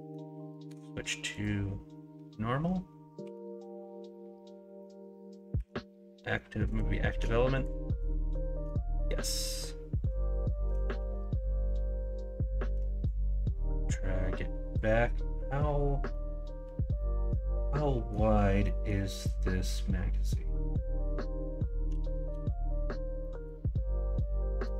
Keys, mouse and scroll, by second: 3.2 2, 23.2 scroll up 1, 24.1-24.6 scroll up 1.